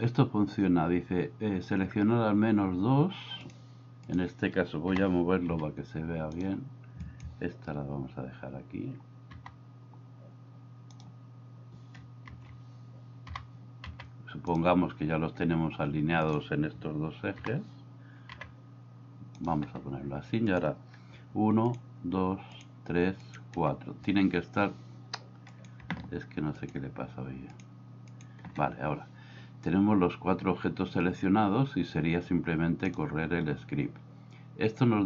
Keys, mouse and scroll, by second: 5.0 g, 9.3 g, 12.3 ctrl+z, 13.4 g, 17.5 g, 32.8 click.